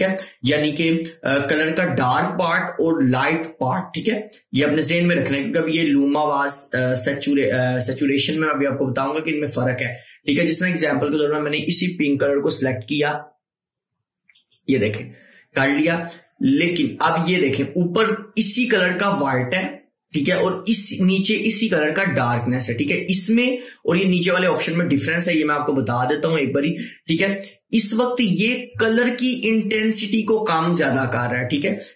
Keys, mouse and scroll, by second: 11.6 click, 14.5 click, 16.8 click, 25.8 scroll down 1, 28.3 click.